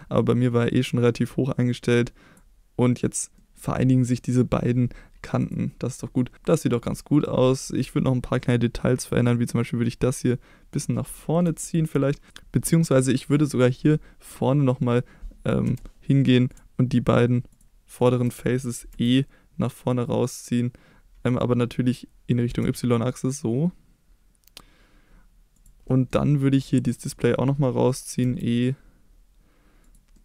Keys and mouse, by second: 3.3 middle click, 5.4 click, 6.1 middle click, 9.2-10.8 drag, 11.1 middle drag, 11.6 shift+middle drag, 12.0 middle drag, 15.6 3, 16.5 shift+click, 17.5 shift+click, 18.9 e, 22.4 y, 25.5 click, 25.8 middle drag, 26.9 click, 27.2 middle click, 28.2 e, 29.8 click, 30.1 middle click.